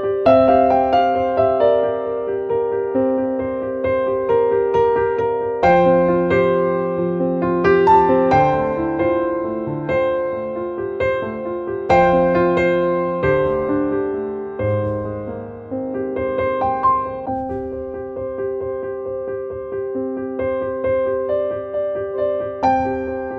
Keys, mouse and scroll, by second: 5.2 right click, 6.4 click, 7.5 scroll down 1, 8.8 click, 9.6-10.1 scroll down 1, 10.1 click, 12.3 click, 13.7-16.4 drag, 16.6 click, 17.7 click.